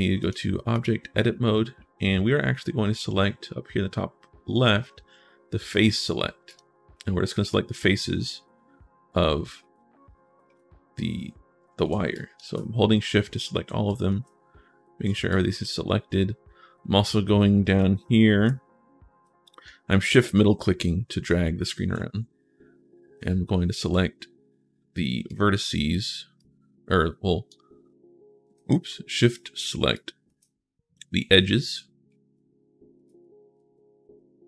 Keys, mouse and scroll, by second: 0.0 click, 0.5 click, 1.1-1.6 scroll up 1, 6.3 click, 7.3 click, 9.4 shift+right click, 11.9 shift+click, 13.7-14.8 shift+right drag, 15.0 shift+right click, 15.1 shift+click, 16.0-16.4 scroll up 1, 16.6 right click, 17.0 click, 18.0 shift+click, 19.7 shift+click, 25.1 click, 26.2-27.3 drag, 28.3 ctrl+z, 29.7 shift+click, 31.8 Caps_Lock.